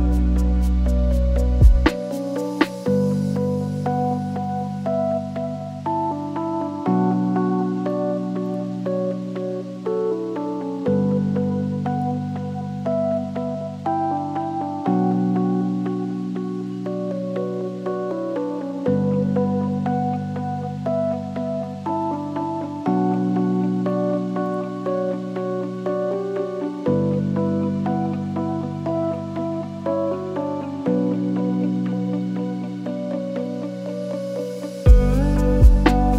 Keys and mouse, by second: 0.0 shift+middle click, 0.7-2.6 drag, 3.0 g, 6.3 shift+middle click, 11.5 click, 18.3-19.7 shift+drag, 20.6 click, 24.1 shift+middle click, 25.5 space, 28.5 space, 29.5 r, 31.9-32.5 drag, 34.2 middle click, 36.0 ctrl+t.